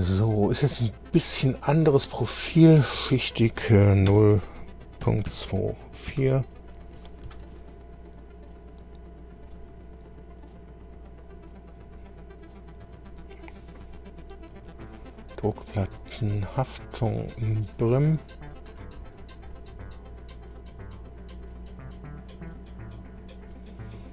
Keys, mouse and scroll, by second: 2.8 click, 4.1 KP_0, 5.0 ., 5.3 KP_2, 6.1 KP_4, 7.3 Tab, 8.1-9.0 scroll down 4, 9.3-9.6 scroll down 2, 10.0-10.8 scroll down 4, 11.3-12.0 scroll down 4, 12.8-13.2 scroll down 2, 14.4-14.8 scroll down 2, 16.0 click, 17.3 click, 18.7 click.